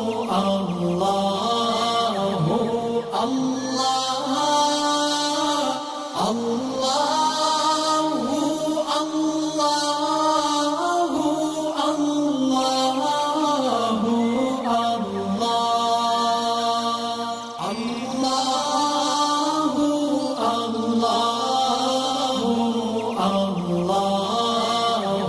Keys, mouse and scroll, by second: 1.9-2.5 alt+drag, 4.1 alt+scroll down 1, 4.6 space, 4.6 click, 6.0 alt+scroll up 1, 6.5 space, 6.6 click, 7.4 space, 7.5 click, 8.2 alt+scroll up 1, 8.7 alt+scroll down 1, 10.1 alt+scroll up 1, 10.9-20.7 drag, 21.0 click, 21.9 alt+scroll down 2, 22.3 alt+scroll up 1, 23.2 shift+click.